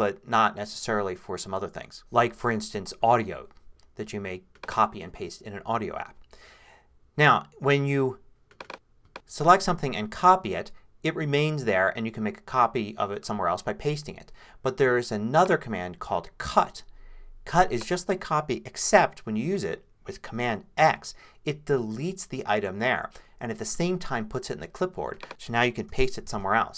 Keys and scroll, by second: 20.8 super+x, 25.9 super+v, 26.3 super+Return.